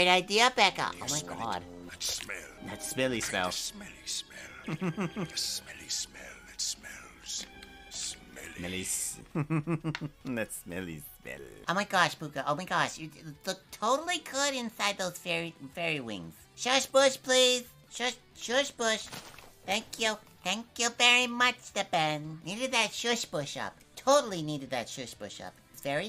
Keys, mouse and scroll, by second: 25.6 click, 25.8 space.